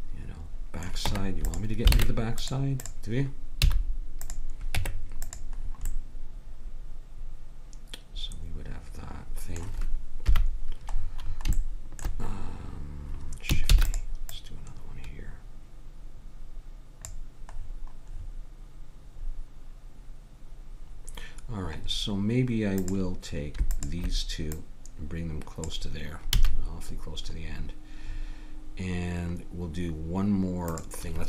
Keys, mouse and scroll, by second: 1.1 Tab, 2.0 ctrl+Tab, 2.8-4.6 drag, 3.6 x, 4.7 Tab, 10.3 KP_1, 13.7 shift+d, 22.8-24.6 drag, 26.3 a.